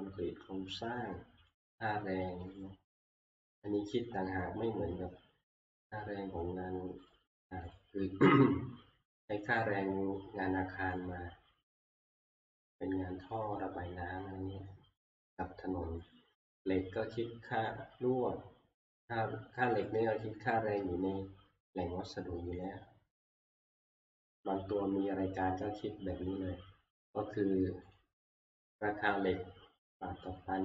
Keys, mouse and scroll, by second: 1.6 click, 2.6 click, 3.4 click, 7.1 click, 7.8 click, 9.6 click, 11.1 click, 13.3 click, 16.1 click, 17.7 click, 20.0 click, 22.7 click, 27.9 click, 28.6 click.